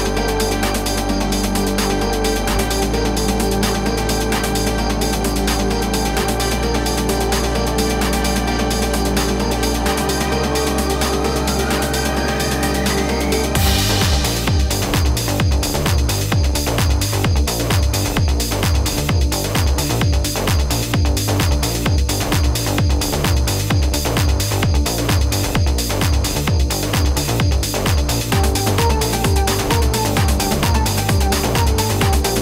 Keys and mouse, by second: 2.2 click, 5.7 click, 6.5 click, 8.5 click, 9.7 click, 12.1 click, 13.4 -, 13.9 click, 15.1 click, 15.7 click, 16.6 click, 17.9 click, 19.0 click, 20.3 click, 21.5 click, 22.7 click, 25.0 click, 27.8 click, 28.9 click, 29.9 click, 31.4 click.